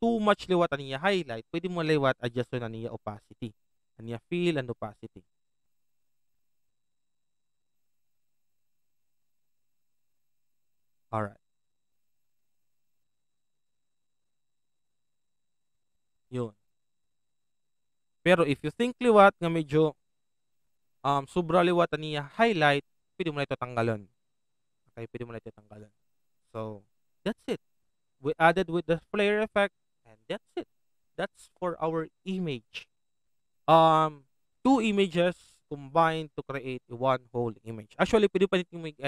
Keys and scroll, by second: 19.4 ctrl+alt+t.